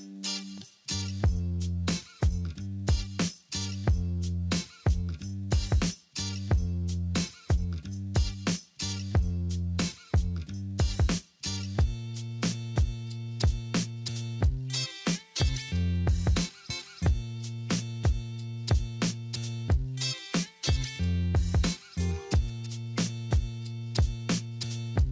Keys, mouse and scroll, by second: 8.6 double click, 22.4 double click, 23.2 0, 23.3 Return, 24.8 5.